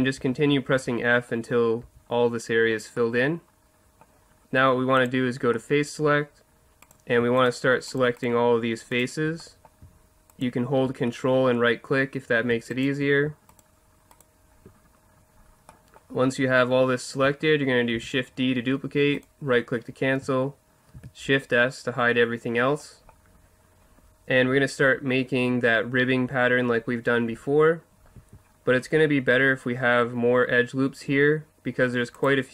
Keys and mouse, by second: 0.2 f, 0.8 f, 1.8 f, 5.0-6.7 drag, 5.5 middle click, 6.9-9.6 right drag, 9.6-11.3 drag, 11.3-12.7 middle drag, 12.7-15.7 right drag, 15.8-16.7 middle drag, 18.0 shift+d, 19.2-20.9 right drag, 20.9 shift+h, 28.1 a.